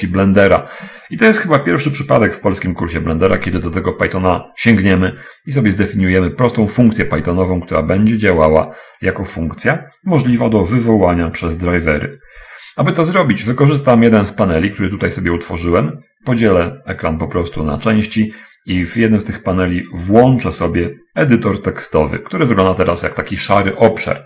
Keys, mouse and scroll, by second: 5.3-6.7 drag, 8.3-9.6 drag, 17.0 click, 19.1 click.